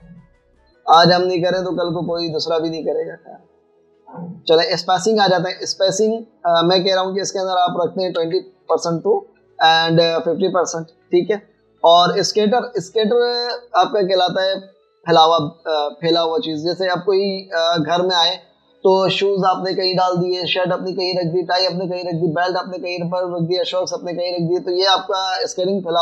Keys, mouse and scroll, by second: 9.2-12.2 typing, 9.8 Tab, 12.0 Tab.